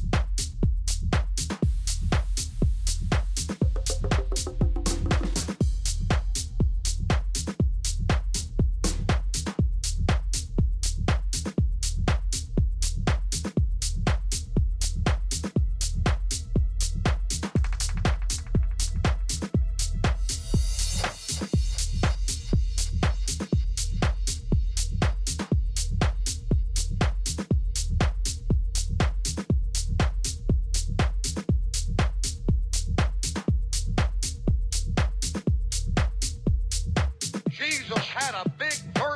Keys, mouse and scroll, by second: 1.2-3.1 drag, 3.6-6.2 middle drag, 6.2-6.8 scroll up 1, 6.2 s, 7.9-9.3 middle drag, 9.3-10.9 drag, 11.9 s, 14.5-16.3 drag, 16.8 s, 21.3-23.2 drag, 28.1-29.8 drag, 34.9-37.1 middle drag, 36.0 z, 37.2 Tab, 38.5-39.1 typing.